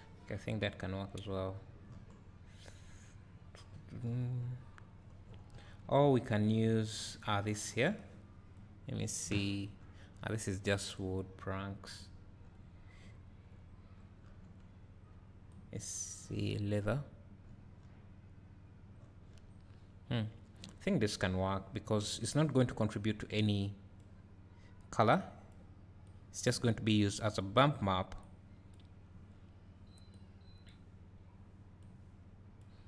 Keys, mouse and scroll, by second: 8.9 click, 25.2 click, 27.0 click, 28.2 click, 32.6-32.8 drag.